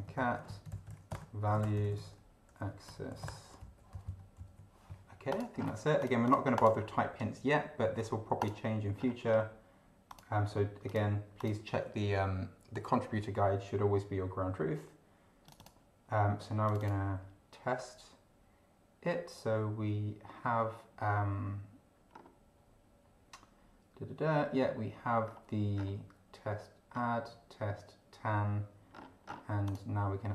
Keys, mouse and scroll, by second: 0.0-3.3 typing, 3.6 End, 3.9 Right, 4.0 Down, 5.3 click, 5.6 scroll down 1, 6.0 click, 8.4 click, 9.0 scroll up 2, 10.1 click, 10.9 click, 11.4 click, 15.5 click, 16.7 click, 22.2 scroll down 2, 25.2-25.6 scroll down 2, 25.8 scroll down 2, 27.0 scroll down 2, 29.0 scroll down 2, 29.6 click.